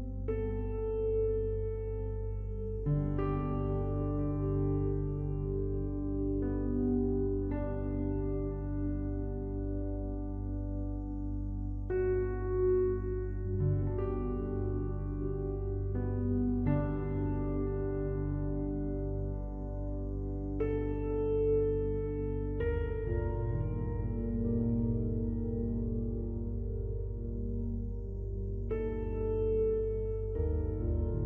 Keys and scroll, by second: 20.7 ctrl+t.